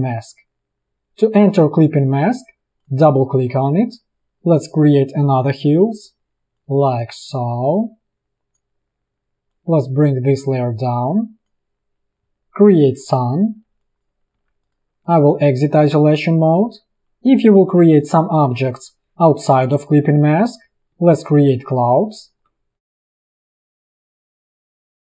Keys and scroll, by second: 6.4 space, 9.4 v, 13.6 v, 14.0 i, 14.5 v, 17.6 i, 18.6 v, 19.5 p.